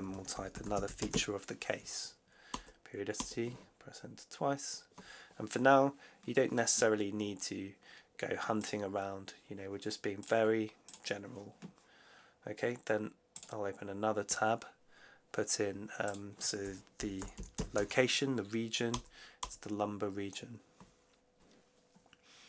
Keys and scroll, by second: 0.0-1.5 typing, 2.4 Return, 3.2 Return, 16.7-18.2 typing, 18.8 Return.